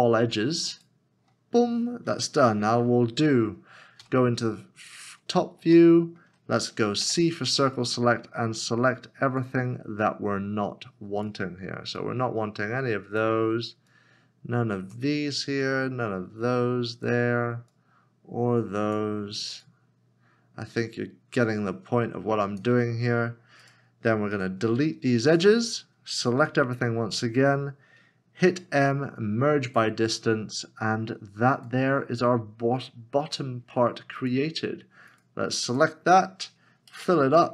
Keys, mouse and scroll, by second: 4.0 right click, 4.9 scroll up 1, 5.8 shift+middle click, 7.0 c, 23.6 right click, 26.4 a, 28.5 m, 33.6 m, 36.9 Tab.